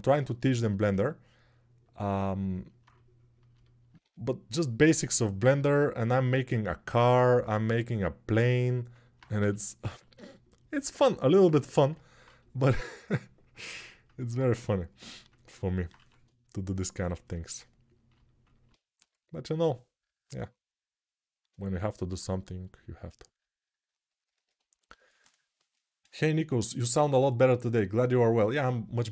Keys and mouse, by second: 9.1 g, 15.7 1, 18.7 g.